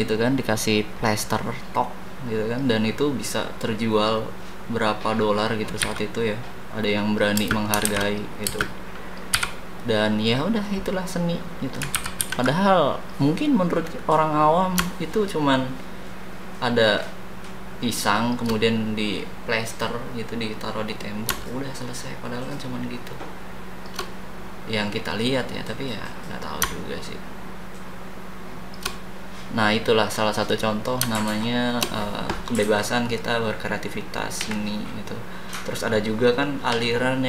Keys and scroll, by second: 5.8 a, 7.3 space, 7.8 shift+s, 8.4 space, 9.3 d, 11.9 ctrl+c, 12.3 ctrl+v.